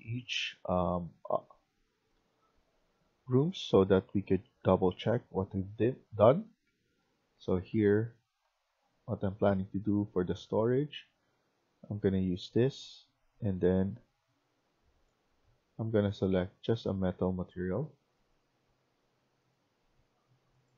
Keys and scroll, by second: 0.0-1.8 typing, 2.5 F1, 3.3 s, 3.6 d, 4.8-7.7 typing.